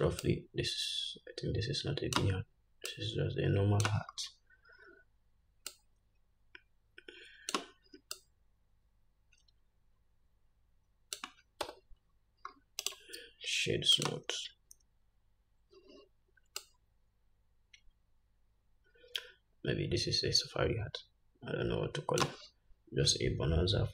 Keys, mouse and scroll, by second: 4.6-6.1 scroll up 2, 6.1 scroll up 1, 12.0 Tab, 12.5 scroll down 2, 13.2-19.2 right drag, 13.2-13.9 scroll down 1.